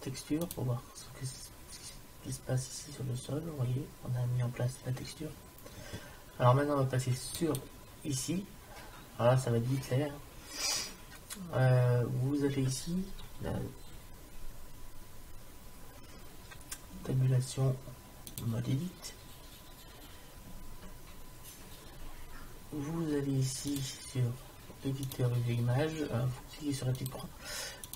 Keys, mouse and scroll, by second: 7.4-9.1 right drag, 17.0 Tab, 23.7-24.8 drag.